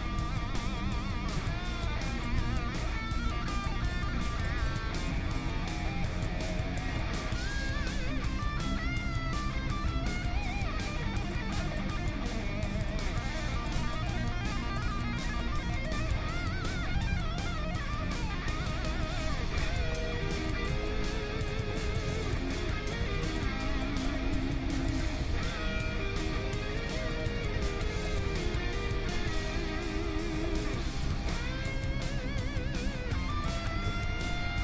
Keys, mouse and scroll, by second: 0.8 g, 1.8-4.3 middle drag, 2.4 Tab, 3.7 Tab, 4.5 Tab, 5.1 Tab, 7.5-9.3 right drag, 7.8 g, 9.8 g, 11.3-15.2 middle drag, 11.6 Tab, 12.8 Tab, 15.2-18.4 right drag, 16.9 g, 19.0-20.4 right drag, 19.5 g, 20.4 click, 20.7 Tab, 21.1-23.1 middle drag, 23.0 Tab, 24.3-26.1 right drag, 25.2 g, 26.8-28.3 right drag, 28.3-29.8 drag, 28.3 g, 29.8 middle click, 30.5-31.8 middle drag, 31.1 Tab, 34.0 Tab, 34.2-34.6 right drag.